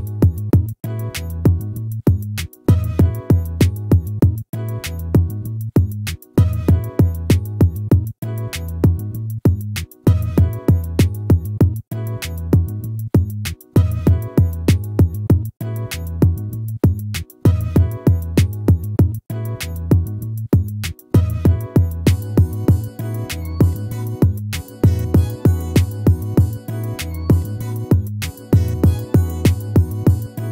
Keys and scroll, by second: 24.0 ctrl+z.